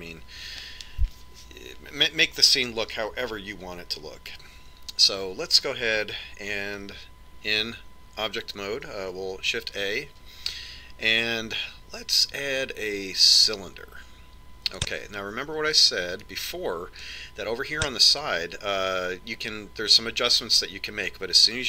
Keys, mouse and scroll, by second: 10.9 shift+a, 17.7 click, 19.5 click, 19.6 click.